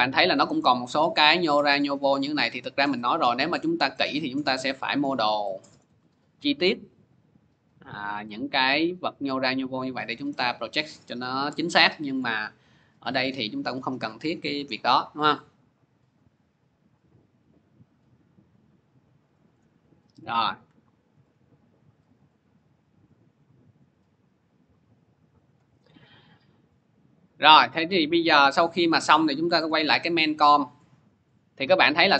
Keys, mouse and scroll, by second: 0.5-0.9 scroll, 3.1 scroll, 3.8 scroll, 5.7 scroll, 6.9 click, 7.4 scroll, 7.9 scroll, 9.3 scroll, 10.2-11.9 scroll, 12.7 p, 19.4-24.5 drag, 25.3-32.1 drag.